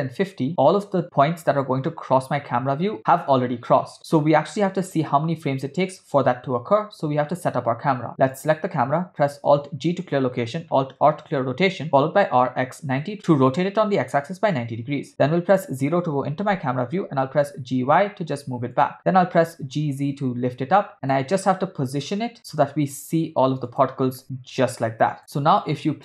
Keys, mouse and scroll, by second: 1.1 space, 3.7 space, 8.3 space, 8.3 click, 9.7 alt+g, 11.0 alt+r, 11.9 r, 14.9 KP_0, 16.1 g, 22.0 g, 24.2 g, 25.2-26.0 drag.